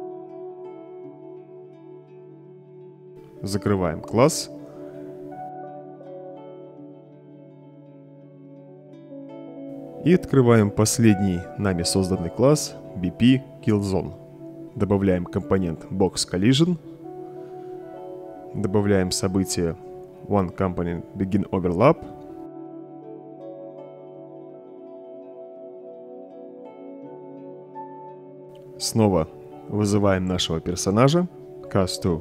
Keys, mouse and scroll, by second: 0.9 click, 1.4 click, 8.7 click, 11.8 click, 15.7 click, 16.9-18.0 typing, 19.9 click, 20.4 click, 20.6 right click, 23.1 click, 24.2 right click, 25.0 right drag, 25.5-25.9 drag, 27.0-28.1 right drag, 29.2-30.4 drag, 31.1-32.2 typing.